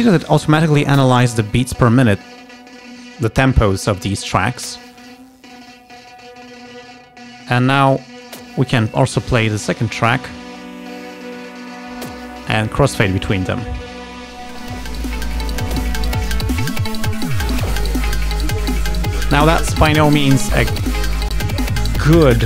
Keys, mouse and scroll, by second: 7.9 click, 9.5 click, 11.7 click, 14.1-17.8 drag, 20.9 space, 21.9 space.